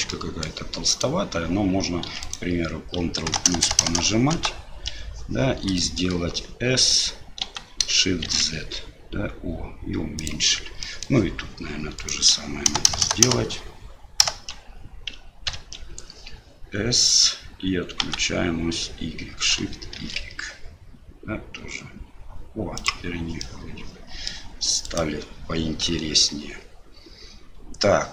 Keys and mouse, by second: 0.1 middle click, 0.9 right click, 2.2 right click, 3.3-4.9 ctrl+KP_Add, 5.8 shift+click, 8.0 shift+s, 11.0 middle click, 12.0 click, 12.7-14.5 ctrl+KP_Add, 15.5 ctrl+KP_Subtract, 18.0 s, 23.5 middle click, 24.8 right click.